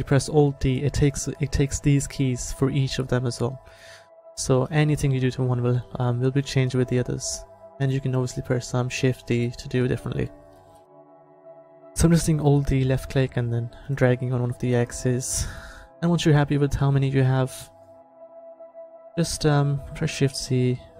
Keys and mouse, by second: 2.5 s, 4.5 alt+d, 7.7 s, 10.6 alt+d, 12.5 click, 13.2 s, 14.6 alt+d, 15.4-17.8 drag, 18.7-20.3 drag, 20.3 shift+c.